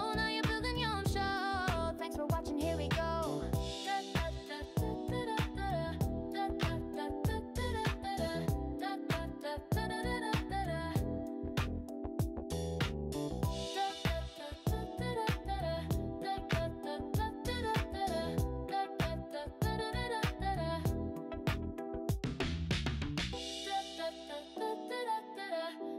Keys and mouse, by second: 0.3 g, 2.7 click, 3.6 g, 4.6 click, 5.4 click, 6.1 g, 8.0 click, 9.2 g, 10.6 click, 11.4 click, 12.4 g, 13.8 click, 14.4 g, 15.6 click, 16.4 click, 17.0 g, 17.8 click, 19.1 g, 19.7 click, 20.4 click, 21.1 g, 22.5 click, 22.8 g, 23.6 click, 24.7 g.